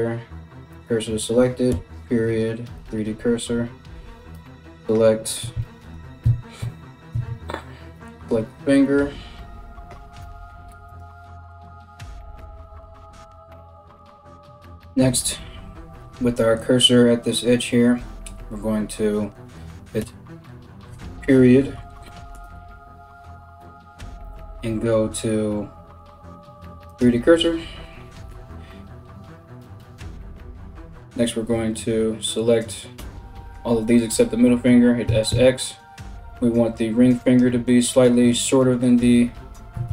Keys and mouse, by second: 1.3 ., 4.3 l, 4.3 k, 5.8-7.6 typing, 9.8 r, 23.2 ., 27.9 KP_7, 31.5 l, 32.6 l, 34.7 s, 39.4 a, 39.5 a.